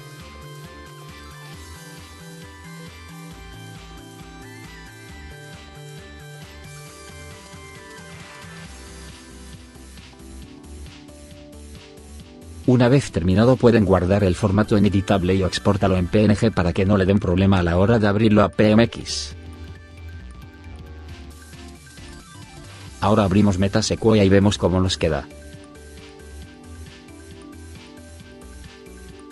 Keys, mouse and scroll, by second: 17.7 click.